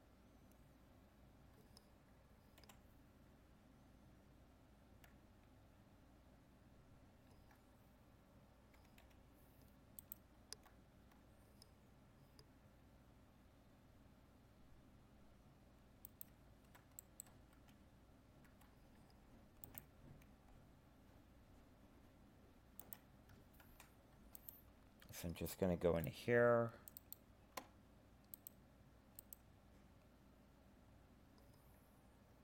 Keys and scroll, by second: 23.6 ctrl+Tab.